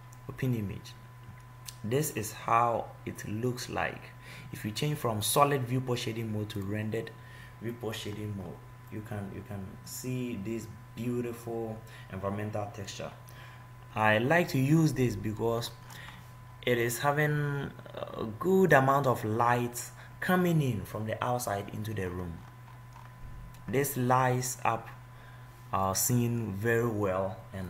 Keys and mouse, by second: 11.8-13.1 middle drag, 16.2-18.0 middle drag, 20.5 middle click, 27.4-27.6 middle drag.